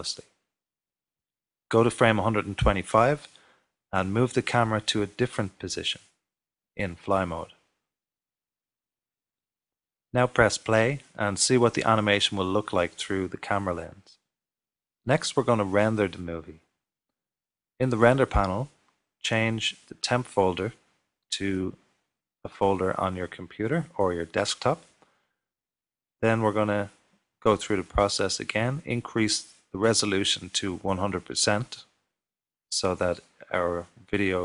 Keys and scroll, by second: 5.2 shift+f, 7.6 shift+f.